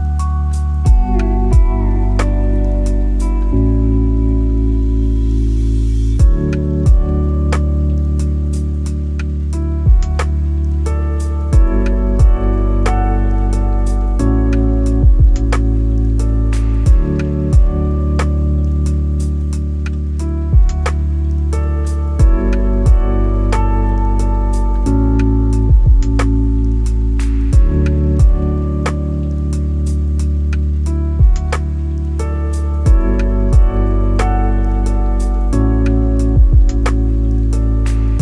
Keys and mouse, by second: 0.2-1.2 drag, 1.6 ctrl+z, 2.9 click, 3.6 click, 4.7 click, 5.3 click, 6.8-7.9 drag, 8.3 middle click, 13.9 click, 16.0-18.4 drag, 19.6 middle click, 21.4 shift+click, 25.0-27.0 drag, 27.4 click, 32.3-34.6 drag, 35.4 click, 36.6 click, 37.6 click.